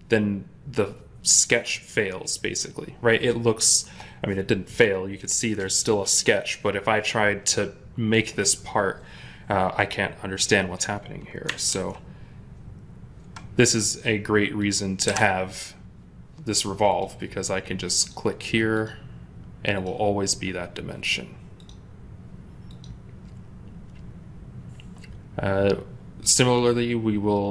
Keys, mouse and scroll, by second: 11.6 ctrl+z, 14.9 Delete.